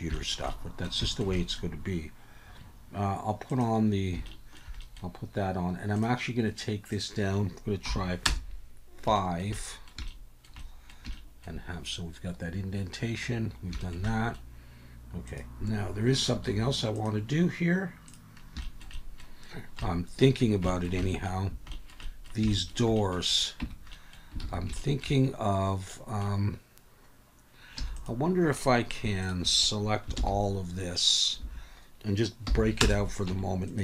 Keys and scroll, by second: 23.6 Tab, 24.4 alt+a, 27.8 3, 30.2 ctrl+l, 31.4 Escape, 32.4 p, 33.3 Tab.